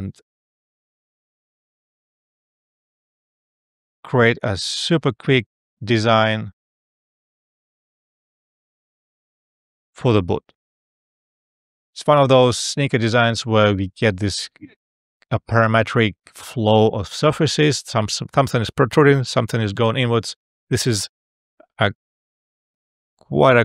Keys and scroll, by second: 5.0 Return, 7.4 F5.